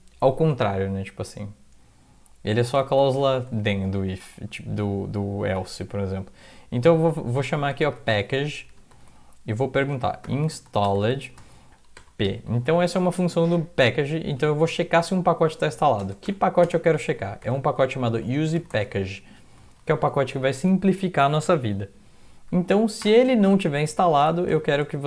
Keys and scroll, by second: 3.0 typing, 5.4 Left, 7.5-12.7 typing, 16.0 space, 17.2-20.1 typing, 22.1 typing, 22.3 Right, 23.0 Return, 24.2-25.0 typing.